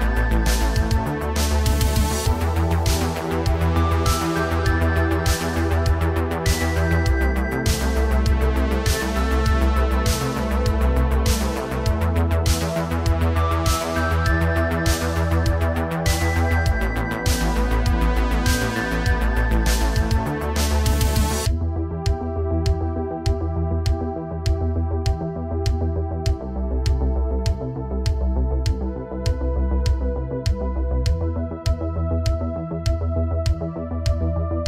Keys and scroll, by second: 1.9 space, 4.1 g, 10.6 ctrl+c, 12.8 ctrl+shift+v, 14.0 space, 20.4 alt+h, 21.2 space, 28.3 r, 28.7 z, 28.8 z, 31.8 i.